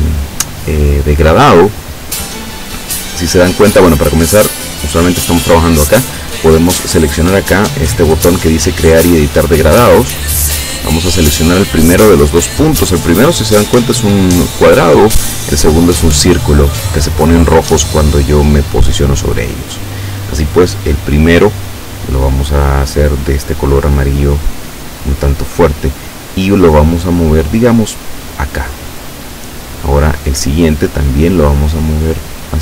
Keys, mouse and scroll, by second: 4.9 click, 9.6 click, 19.5 click, 26.8-28.8 drag, 30.3-32.6 drag.